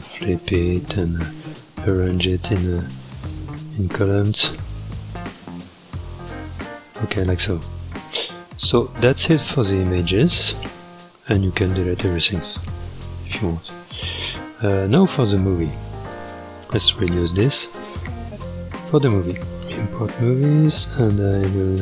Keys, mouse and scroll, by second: 0.3-4.8 drag, 4.8-5.7 scroll down 7, 5.7 shift+middle click, 6.5-7.5 scroll up 4, 7.5 scroll up 3, 7.9 scroll down 1, 9.3-9.9 scroll down 5, 10.3-10.8 scroll up 1, 12.9-13.5 scroll up 3, 13.7-14.0 scroll down 1, 15.3 click, 15.8-16.2 scroll up 1, 17.4-21.8 drag.